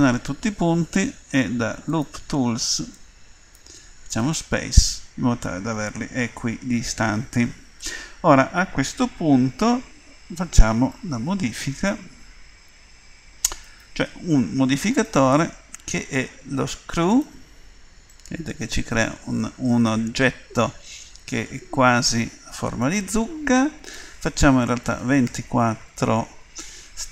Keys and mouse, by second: 1.9-10.6 drag, 13.6-17.2 drag, 18.1 click, 23.8-26.6 drag.